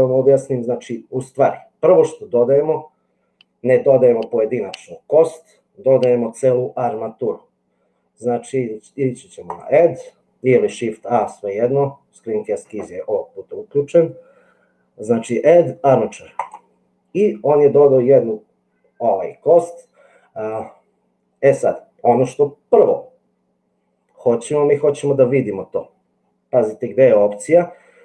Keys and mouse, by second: 9.6-16.6 drag.